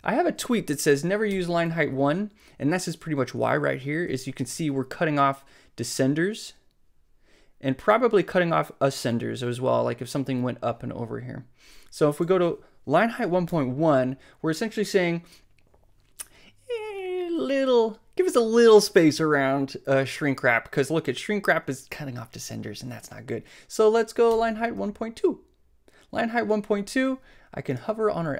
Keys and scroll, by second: 1.3 alt+Up, 13.5 alt+Up, 24.3 alt+Up.